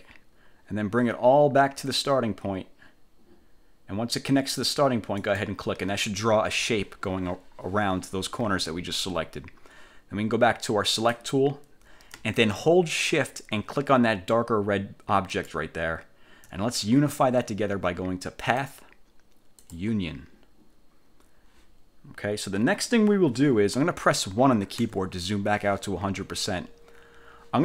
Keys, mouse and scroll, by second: 5.3 click, 11.0 click, 15.4 shift+click, 18.5 click, 19.7 click, 25.0 1.